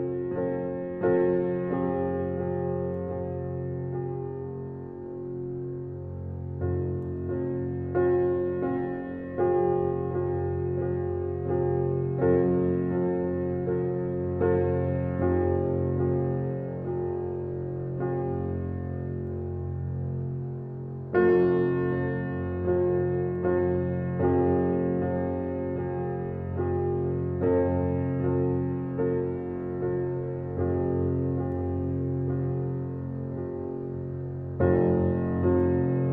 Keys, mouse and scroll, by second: 0.4 click, 0.7 click, 1.8 middle click, 2.5-3.4 scroll up 1, 3.4 alt+e, 5.4-7.3 middle drag, 7.7 alt+z, 8.1 shift+click, 9.0 alt+e, 12.1-13.4 drag, 14.0-17.2 drag, 17.2 Tab, 17.4-18.0 scroll down 1, 18.2 click, 18.7 click, 18.9-19.8 scroll down 7, 19.2 middle drag, 19.8 alt+middle click, 20.8 click, 21.4 shift+d, 22.8 g, 25.1 shift+d, 27.2 click, 27.8 click, 28.5 click, 29.7 x, 30.2-30.7 right drag, 30.7 alt+middle click, 31.2 shift+middle click, 31.5-32.1 scroll up 1, 32.1 shift+d, 33.8 g, 35.7 shift+d.